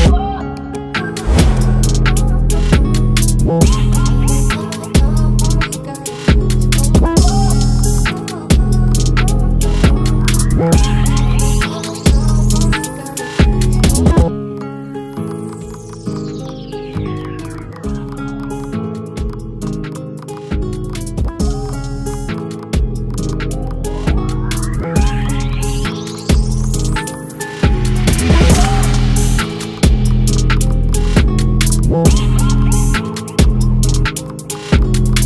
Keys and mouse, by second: 7.9 click, 11.5 right click, 11.7 click, 12.3 click, 26.3 click, 26.7 click, 27.3 click.